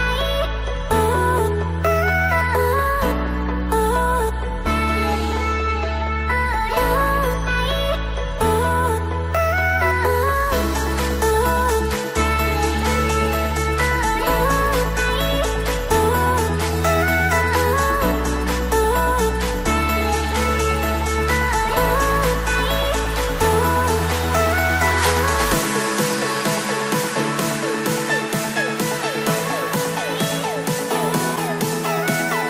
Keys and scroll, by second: 0.0 ctrl+g, 22.8 ctrl+0.